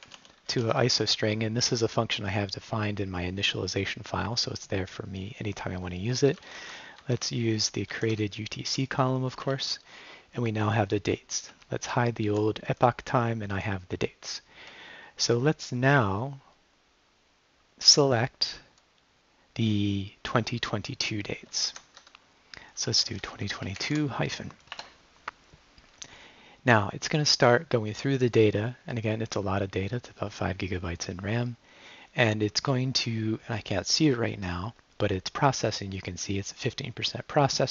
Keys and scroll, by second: 0.0-1.0 typing, 6.0-7.9 typing, 9.4 Return, 11.5 Left, 12.3 -, 21.7-23.8 typing, 24.7 Return.